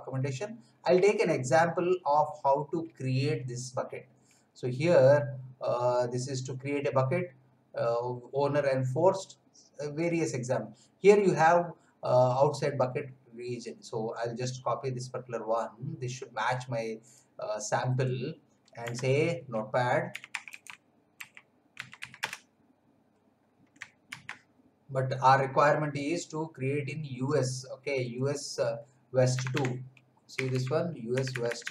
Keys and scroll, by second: 19.9-22.5 typing, 24.1 ctrl+v, 29.3-31.0 typing, 31.1 Right.